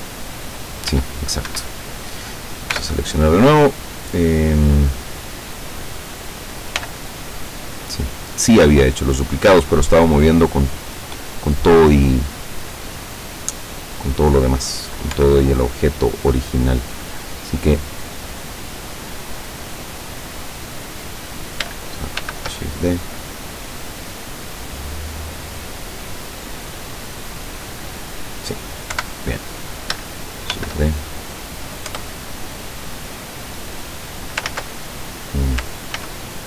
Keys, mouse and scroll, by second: 0.1 click, 1.0 x, 1.6 Escape, 2.0 right click, 2.8 l, 6.8 x, 7.2 click, 8.4 right click, 9.6-9.9 scroll up 1, 15.1 l, 17.1-17.7 scroll down 2, 17.9 scroll down 2, 22.3 shift+d, 25.6 click, 26.0-30.0 middle drag, 29.0 KP_7, 30.6 shift+d, 32.0 Return, 32.6-34.0 drag, 34.6 ctrl+z, 36.0 ctrl+z.